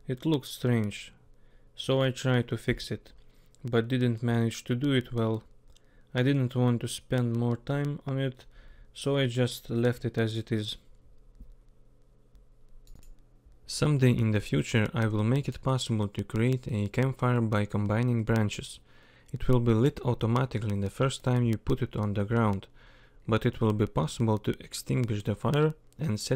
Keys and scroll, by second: 8.0 k, 9.0 k, 9.8 k, 11.2 k, 11.7 k, 12.7 k, 13.5 k, 14.9 k, 15.7 k, 17.0 k, 18.2-21.5 typing, 22.5 k, 23.8 k.